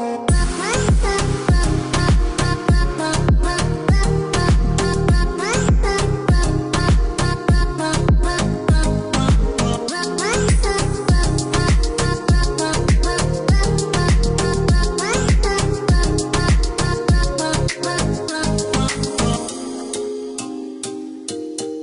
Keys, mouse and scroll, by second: 1.6 click, 4.0 click, 5.1 click, 5.9 KP_1, 6.2 KP_7, 6.6 KP_Decimal, 6.9 KP_1, 7.4 KP_Enter, 8.1 Escape, 10.5 click, 12.7 click, 16.1 click, 16.9-17.8 scroll up 1, 17.8-18.5 scroll down 1, 18.5 click, 19.7 click, 21.2 space.